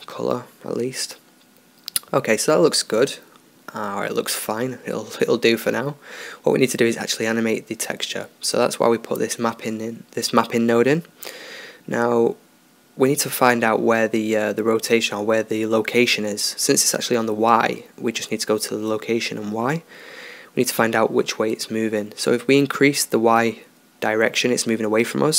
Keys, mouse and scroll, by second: 0.4-1.0 drag, 1.2 drag, 1.4-6.9 middle drag, 6.9-8.6 drag, 8.9-10.1 middle drag, 12.4 middle drag, 14.2-17.2 drag, 19.9-22.3 drag.